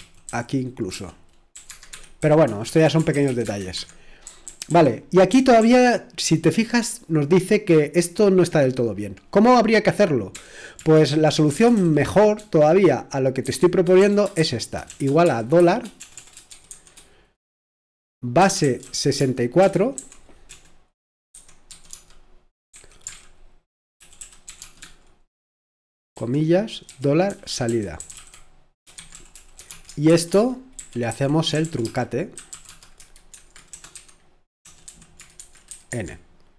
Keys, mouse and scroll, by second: 0.0-4.7 typing, 1.7 Tab, 1.9 Escape, 10.1-11.7 typing, 13.4-16.7 typing, 18.4-22.7 typing, 23.1 alt+z, 23.7-24.6 typing, 25.9-30.1 typing, 31.8-32.7 typing, 35.1-35.9 typing.